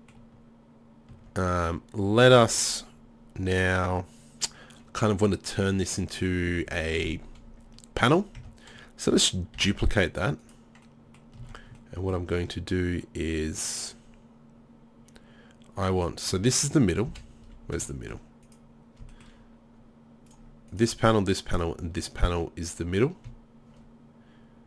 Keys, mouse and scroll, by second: 1.2 Tab, 8.4 Tab, 9.6 shift+d, 11.5 Tab, 13.9 middle click, 14.9-16.0 middle drag, 16.0-17.1 right drag, 17.1 KP_7, 17.5 z.